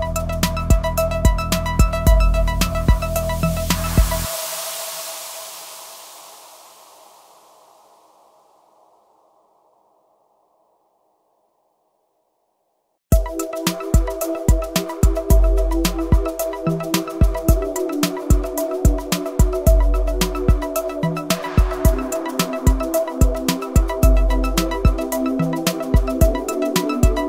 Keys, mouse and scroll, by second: 0.4 scroll down 1, 2.6-7.6 drag, 8.9 scroll down 1, 9.7 scroll, 10.5 click, 11.5 ctrl+0, 12.6-12.9 scroll down 2, 13.1 scroll up 1, 13.5 space, 13.6 click, 13.8 space, 14.3 scroll down 1, 15.3 ctrl+0, 16.2 click, 17.2-18.0 scroll down 1, 18.3 click, 21.3-23.1 drag, 23.9 scroll down 1, 24.6 click.